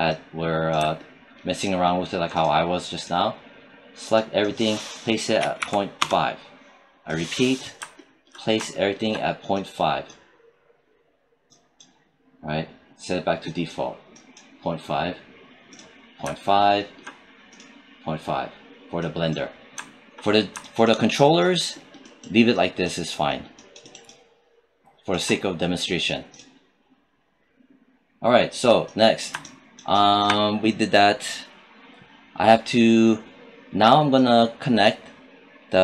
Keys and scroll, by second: 5.2 ., 5.4 5, 5.8 Return.